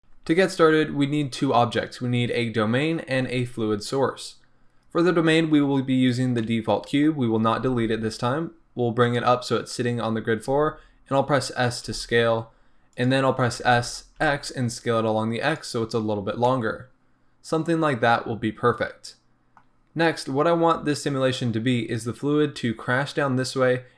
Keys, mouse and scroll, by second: 6.5-7.5 middle drag, 7.5 g, 9.1 click, 10.5 s, 11.8 g, 13.0 click, 13.5 s, 15.6 click, 16.5-23.9 middle drag.